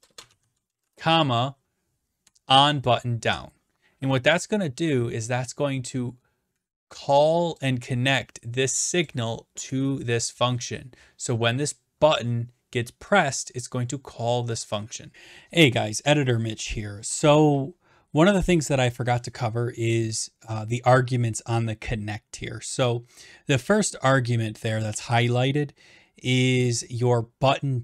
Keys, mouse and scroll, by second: 0.0-0.9 typing, 2.8 Tab, 7.5-8.7 drag, 9.1-10.2 drag, 14.7 click.